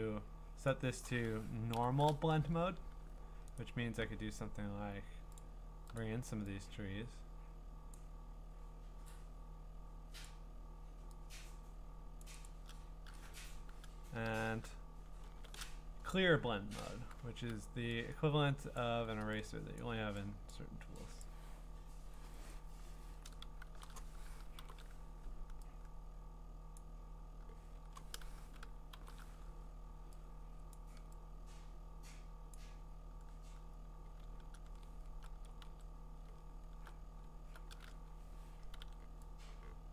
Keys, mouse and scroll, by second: 0.7 click, 1.7 alt+shift+n, 3.6 right click, 5.4 click, 6.0 click, 7.9 click, 10.2 click, 12.2 click, 12.5 click, 13.3 Escape, 15.2 alt+shift+r, 18.8 click, 19.8 click, 20.5 click, 21.2 click, 24.6 super+n, 26.8 click, 27.8 ctrl+z, 29.0 alt+shift+n, 30.7 click, 32.5 click, 34.2-35.4 scroll, 35.4 ctrl+z, 35.4 scroll, 36.3-36.7 scroll, 37.2 ctrl+scroll.